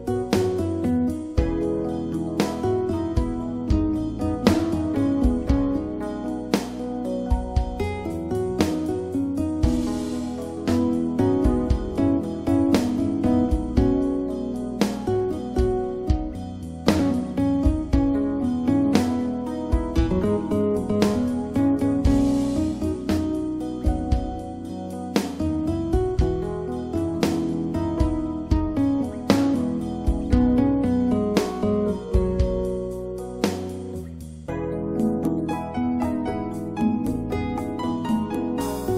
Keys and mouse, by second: 2.1 click, 3.7 shift+s, 5.5 shift+a, 7.3 s, 11.5-13.0 middle drag, 13.0 s, 13.8-14.9 drag, 15.5 right click, 19.9-22.0 right drag, 28.5 r, 33.5-34.9 drag, 34.7 KP_3.